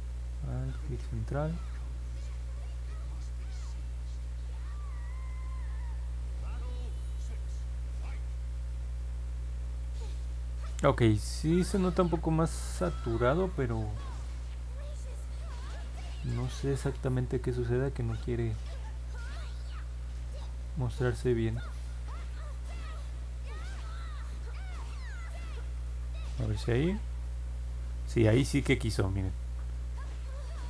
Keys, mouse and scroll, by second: 0.5 alt+middle click, 2.6-5.2 drag, 6.3-7.2 scroll down 3, 7.7 scroll up 1, 8.8 middle click, 10.9 middle click, 11.5 middle click, 16.6-17.9 drag, 18.2 click, 18.5 click, 18.9 click, 19.9 click, 20.3 click, 20.7 click, 21.1 click, 21.4 click, 21.7 click, 22.7 click, 23.1-25.4 drag, 26.6 middle click, 29.1 middle click.